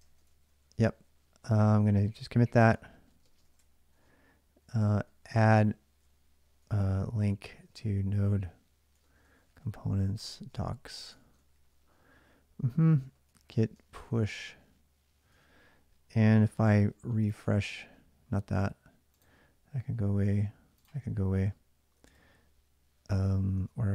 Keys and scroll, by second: 0.0-0.8 typing, 2.3-14.4 typing, 15.1 alt+Tab, 21.8 super+Tab.